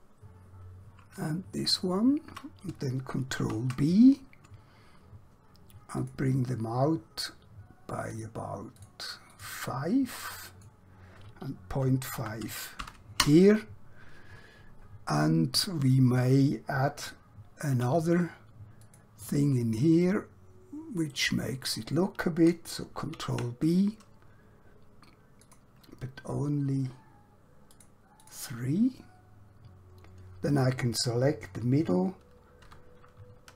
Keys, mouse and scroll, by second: 1.6 alt+shift+click, 3.5 ctrl+b, 6.0 click, 12.1-12.7 typing, 13.2 Return, 16.7 alt+Num_Lock, 17.7 alt+q, 18.9 click, 21.2 right click, 23.1 ctrl+b, 25.5 click, 29.3 scroll up 1, 32.6 3.